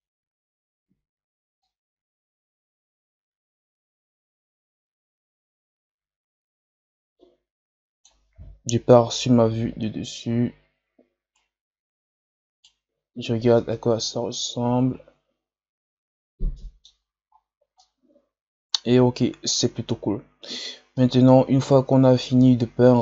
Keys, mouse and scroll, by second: 1.6-5.0 drag, 8.8 KP_7, 11.3-13.1 right drag, 13.1 scroll down 1, 13.5-16.5 middle drag, 17.7-23.0 middle drag.